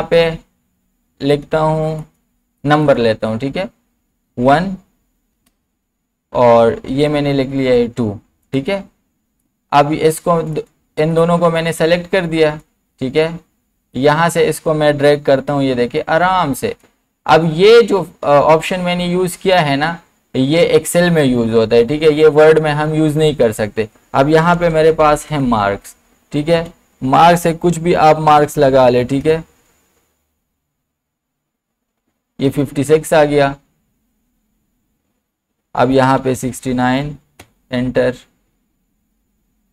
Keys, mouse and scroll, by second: 1.3 click, 4.3 1, 5.4 Down, 6.9 2, 8.5-19.4 drag, 23.3 click, 24.3-25.8 typing, 26.6 Down.